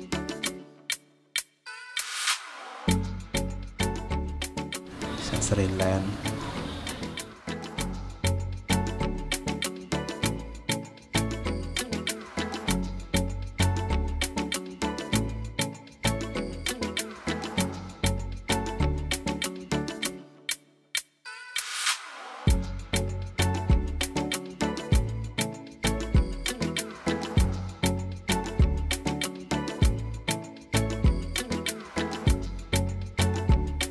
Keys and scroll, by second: 29.0 ctrl+z.